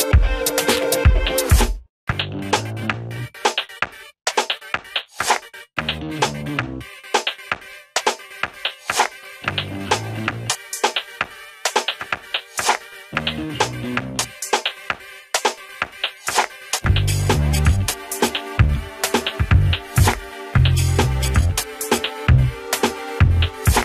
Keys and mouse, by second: 0.7 ctrl+z, 1.0 click, 3.4 Delete, 5.2 click, 11.4 click, 13.5 right click, 14.3-17.3 drag, 17.3 right click, 17.9-23.8 drag.